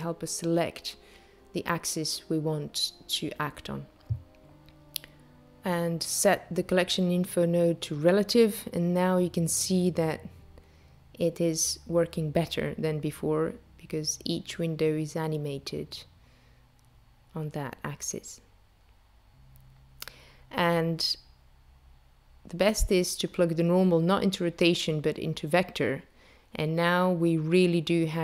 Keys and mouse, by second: 6.1 click, 21.3 click.